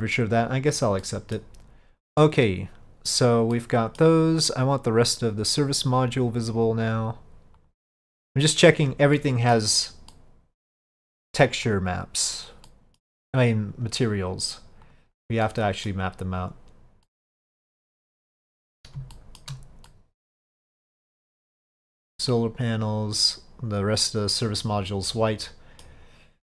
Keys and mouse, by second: 1.1-1.5 middle drag, 3.6-4.1 middle drag, 7.7 click, 8.6 click, 9.2-9.6 middle drag, 10.2-10.8 middle drag, 11.7 click, 12.7-13.1 middle drag, 15.0 click, 15.5-16.0 middle drag, 16.5 click, 17.1-18.0 middle drag, 19.2 shift+middle drag, 20.0-21.8 middle drag, 22.4 click, 24.1-25.9 middle drag.